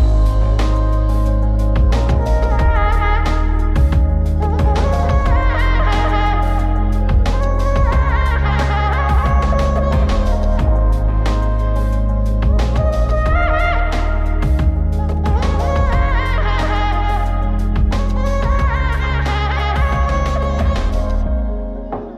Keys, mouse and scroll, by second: 0.8-2.6 right drag, 3.6 shift+a, 6.3-6.9 middle drag, 7.6 click, 8.1 click, 9.5 shift+d, 10.9-13.2 middle drag, 14.6-15.6 drag, 16.1-17.2 drag, 18.4 click, 20.7-21.2 drag.